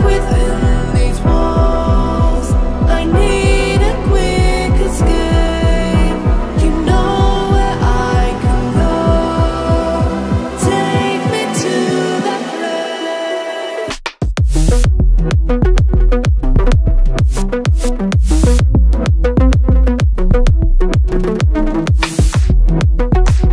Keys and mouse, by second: 0.0 m, 7.8 middle click, 8.3 shift+a, 9.8-11.2 middle drag, 14.0 middle click, 15.3 shift+a, 23.3-23.5 drag.